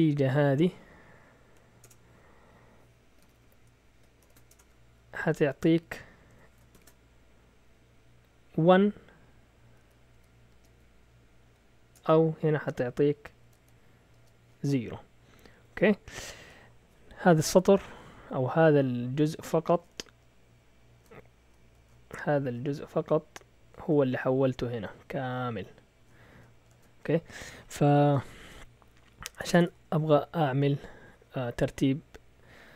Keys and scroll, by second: 0.0-6.7 typing, 10.1-10.7 typing, 11.2 Down, 11.4 Down, 11.9 Return, 13.4-16.4 typing, 21.7 shift+super+z, 26.7 shift+super+z, 29.4 BackSpace, 29.5 BackSpace, 29.6 BackSpace.